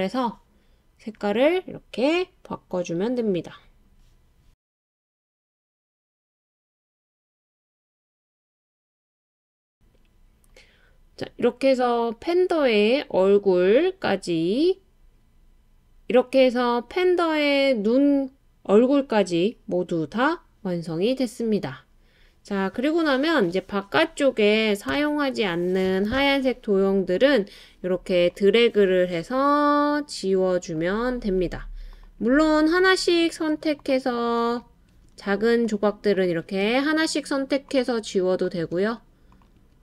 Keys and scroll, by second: 24.9 BackSpace, 29.3 BackSpace, 31.3 BackSpace, 32.4 BackSpace, 33.4 BackSpace, 34.1 BackSpace.